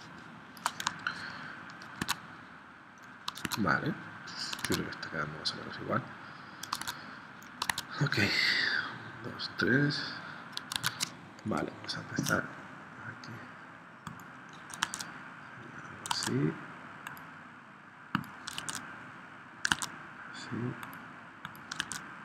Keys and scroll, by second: 2.0 super+Tab, 3.4 super+Tab, 4.6 super+Tab, 6.8 super+Tab, 7.7 super+Tab, 10.7 super+Tab, 11.5 p, 14.8 super+Tab, 16.1 super+Tab, 18.6 super+Tab, 19.7 super+Tab, 21.9 super+Tab.